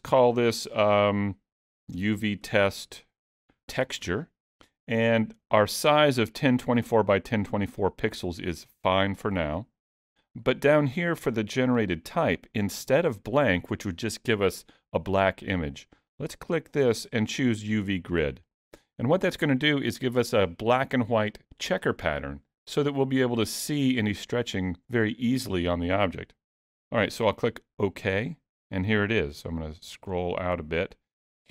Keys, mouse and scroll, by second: 29.2-30.0 scroll down 4, 30.0-30.7 scroll down 5, 30.7-31.5 scroll up 1.